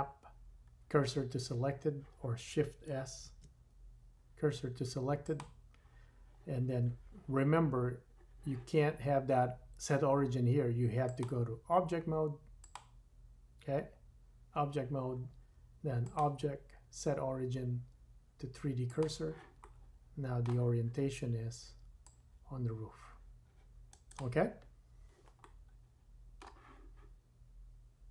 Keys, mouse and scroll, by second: 3.2 shift+s, 19.6 middle click, 24.2-25.1 middle drag, 25.4-28.1 middle drag.